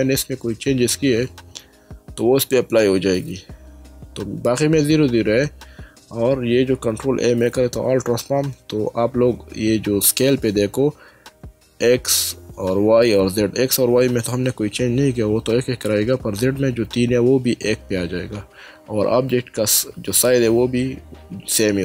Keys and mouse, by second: 6.9 ctrl+a.